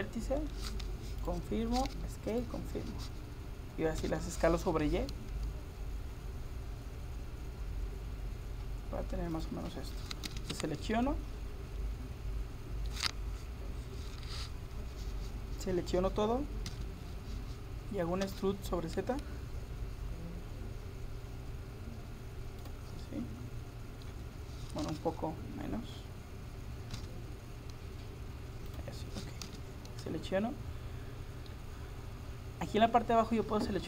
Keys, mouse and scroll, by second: 2.3-4.3 drag, 4.0 s, 10.3 a, 10.9-12.6 middle drag, 16.7 a, 18.3 e, 23.1-24.9 middle drag, 24.9 g, 29.5 a, 29.9-32.7 middle drag.